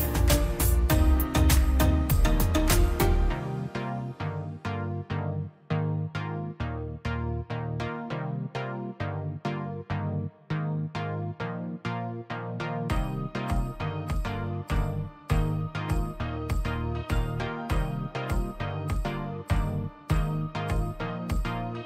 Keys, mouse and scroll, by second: 0.5 Escape, 0.7 click, 4.7 click, 6.7 click, 6.9-7.3 scroll down 1, 7.4 click, 10.1 scroll down 1, 10.4 middle click, 11.5 scroll up 1, 11.9 middle click, 12.1-12.5 scroll down 1, 12.5 middle click, 12.7-13.1 scroll up 1, 13.5 click, 13.6 scroll up 1, 13.9 click, 15.9 Escape, 16.1-18.9 drag, 20.4-20.8 scroll down 1, 21.0 click, 21.2-21.7 scroll up 1, 21.7 click.